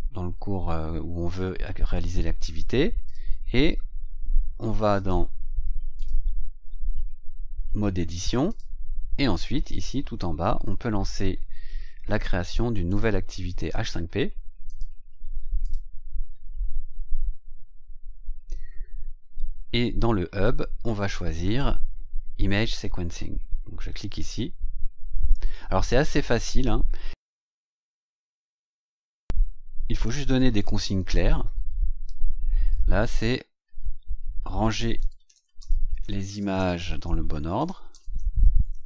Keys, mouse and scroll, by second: 3.0 click, 4.8 click, 5.9 click, 8.4 click, 8.8-12.2 scroll down 20, 12.8 click, 14.6 click, 15.5 click, 19.0-20.2 scroll down 6, 24.0 click, 27.4 scroll up 2, 31.0 click, 34.3-38.8 typing.